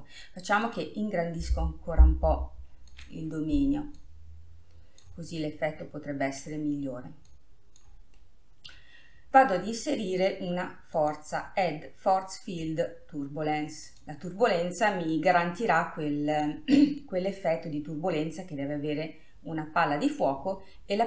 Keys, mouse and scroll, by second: 2.0 s, 3.0 s, 4.1 click, 5.5-7.4 middle drag, 7.4 click, 8.3-11.1 middle drag, 11.1-12.5 drag, 15.3 click, 17.3 scroll down 1, 17.4-20.4 middle drag, 20.6 scroll up 2.